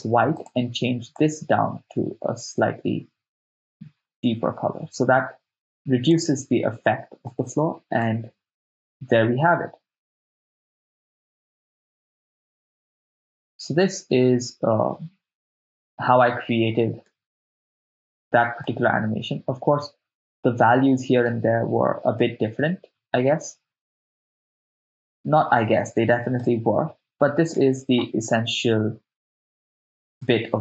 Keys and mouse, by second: 0.4 click, 7.3 middle click, 8.0 shift+space, 11.8 shift+space, 12.7 shift+space, 17.1 shift+space, 18.9-20.8 drag, 21.3 shift+space, 22.2 shift+space, 26.6 shift+space, 27.6 shift+space.